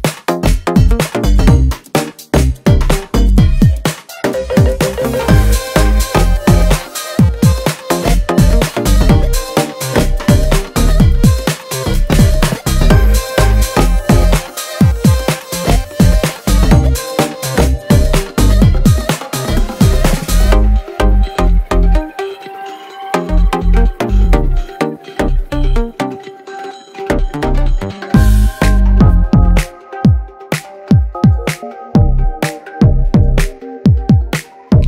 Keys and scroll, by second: 2.0 Tab, 4.0 g, 6.7 space, 12.4 space, 13.1 space, 15.3 shift+a, 16.9 g, 17.1 x, 18.5 g, 18.7 g, 23.0 space, 23.7 space, 33.6 space, 34.3 space.